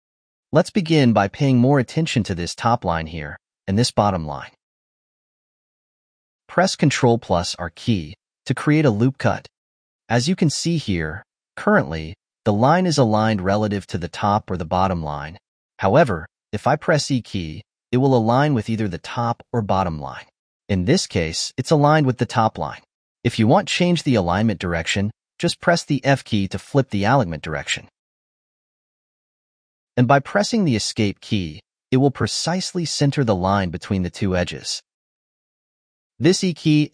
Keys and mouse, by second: 8.1 ctrl+r, 32.3 ctrl+r, 33.7 ctrl+r, 36.3 ctrl+z, 36.6 ctrl+z.